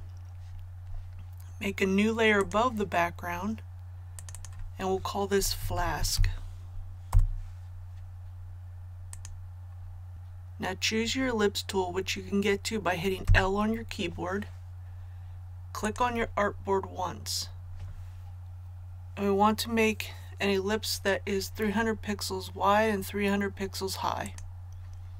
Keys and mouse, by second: 5.1-6.6 typing, 7.1 Return, 9.1 click, 13.2 l, 15.7 typing, 15.9-25.1 drag.